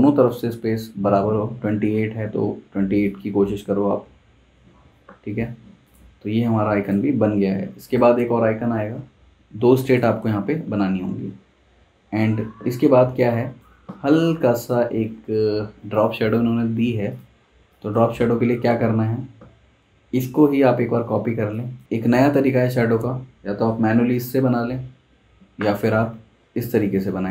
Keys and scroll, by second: 10.2 super+s, 13.9 super+z, 18.1 super+z, 20.7 super+c, 21.0 super+v, 21.8 super+z.